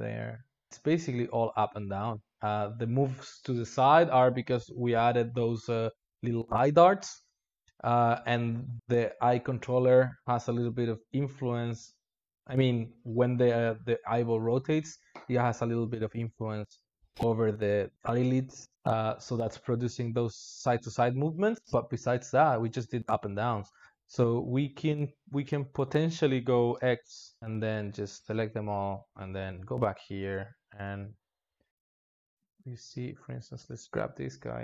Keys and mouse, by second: 2.2 space, 20.0 space, 26.6-28.0 drag, 28.0 a, 31.9-34.6 drag.